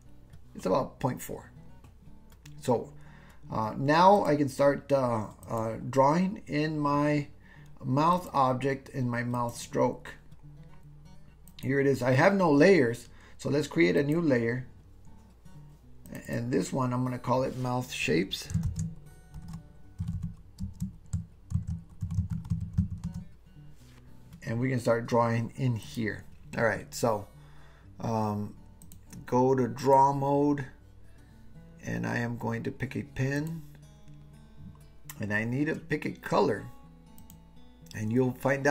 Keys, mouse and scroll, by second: 5.5 click, 8.2 click, 9.4 click, 11.6 click, 14.1 click, 16.1 click, 16.3-24.2 drag, 25.9 click, 29.0-30.0 drag, 33.4 click, 37.2-38.7 drag.